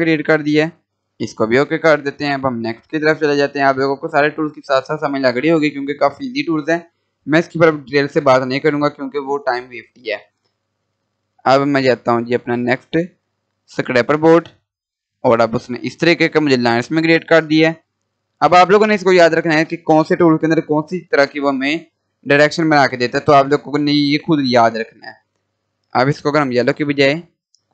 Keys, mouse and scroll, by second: 2.1 Delete, 3.0-5.8 drag, 10.5 click.